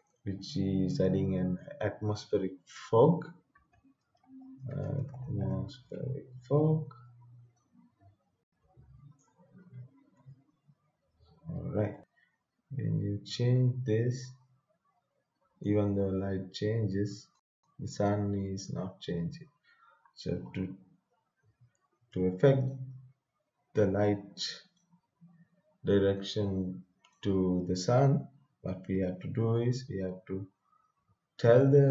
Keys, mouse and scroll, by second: 3.5-6.0 typing, 7.5-11.7 drag, 11.9 right click, 12.0-16.0 drag, 16.0-19.8 right drag, 20.8 scroll up 1, 22.7-24.1 drag, 24.1-29.8 right drag.